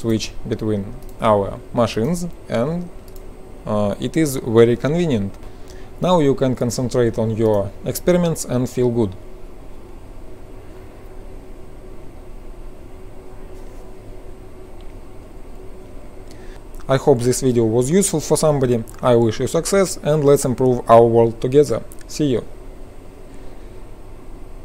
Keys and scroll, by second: 8.0 ctrl+r.